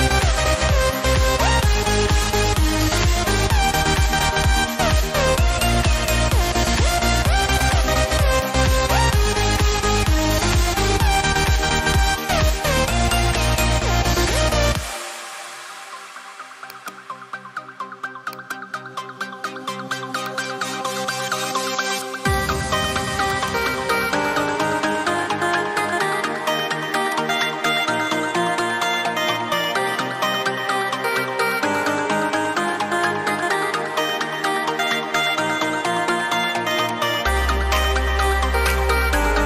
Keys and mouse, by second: 6.1 click, 10.5 ctrl+space, 10.7 ctrl+click, 11.1 space, 11.7 ctrl+click, 12.2 ctrl+space, 16.7 click, 26.9 click, 36.7 click.